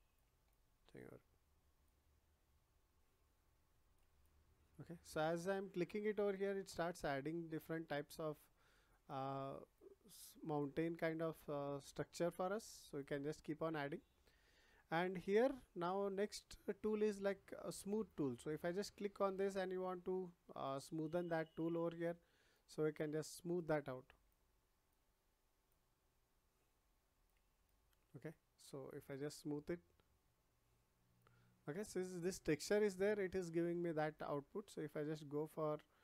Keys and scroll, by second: 12.3 ctrl+z.